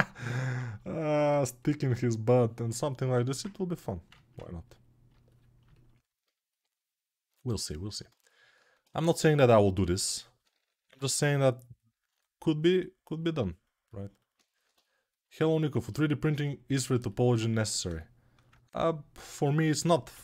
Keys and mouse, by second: 0.5-5.4 drag, 2.6 alt+shift+1, 5.4-8.6 alt+shift+right drag, 8.6-15.5 ctrl+alt+drag, 9.7 g, 10.7 ], 15.5-17.7 alt+shift+right drag, 17.3 1, 17.7-20.2 shift+drag.